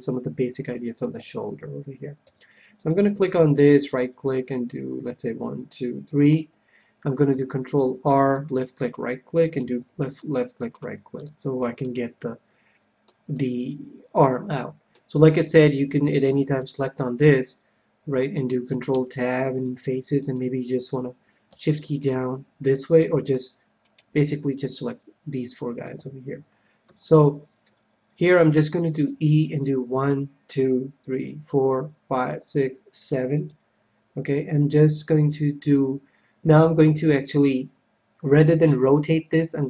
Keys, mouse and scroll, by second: 1.1 a, 2.1 c, 3.9-5.6 right drag, 4.6-6.4 drag, 7.7 ctrl+r, 8.7-12.3 right drag, 9.6 ctrl+r, 11.3-14.9 middle drag, 16.6-18.3 drag, 18.9 ctrl+Tab, 20.1-23.8 right drag, 22.8 c, 24.0-25.3 right drag, 24.4-25.8 middle drag, 25.8 KP_3, 26.0 middle click, 26.8 KP_1, 29.0 e, 33.4-35.3 drag, 38.7 s.